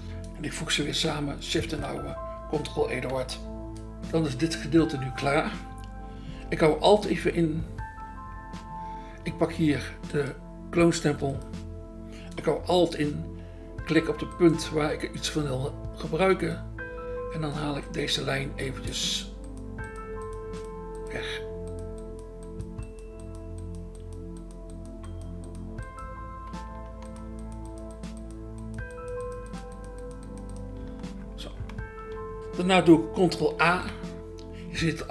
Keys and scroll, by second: 3.1 ctrl+e, 10.6 BackSpace, 33.6 ctrl+a.